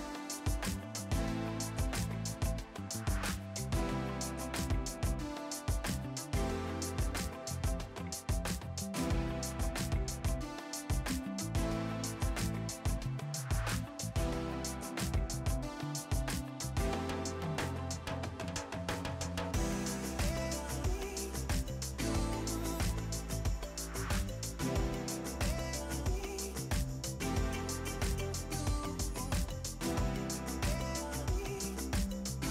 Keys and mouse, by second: 0.3 KP_3, 0.7 Return, 0.9 click, 1.2 Delete, 6.9 click, 7.3 s, 7.5 Escape, 8.2 click, 8.9 Delete, 9.3 click, 10.6 click, 13.8 KP_2, 14.0 Return, 14.6 click, 15.3 ctrl+shift+a, 15.6 click, 16.7 click, 17.0 click, 18.3 ctrl+click, 18.4 Delete, 18.6 click, 18.7 right click, 19.1 click, 19.6 a, 19.7 click, 23.5 Escape, 23.8 click, 25.6 click, 30.9 KP_2, 31.0 Return, 31.3 KP_3, 31.3 Return, 31.8 click.